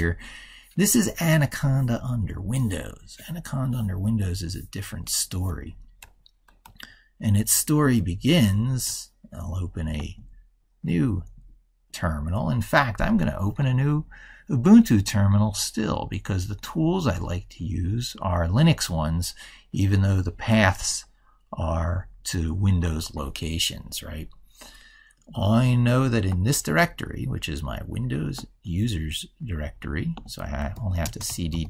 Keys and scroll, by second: 6.4 ctrl+super+Right.